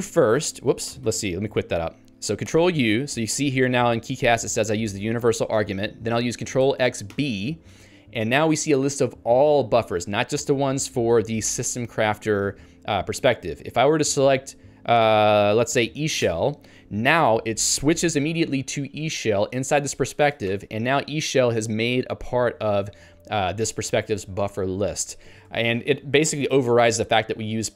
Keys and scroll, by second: 0.9 ctrl+g, 2.5 ctrl+u, 14.3 Down, 16.3 Return, 25.5 ctrl+g.